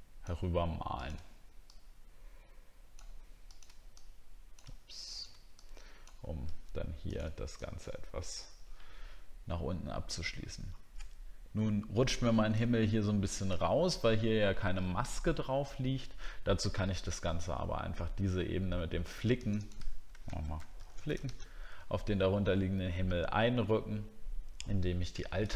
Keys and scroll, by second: 10.3 alt+scroll up 1, 12.7 alt+scroll down 1, 20.4 shift+f.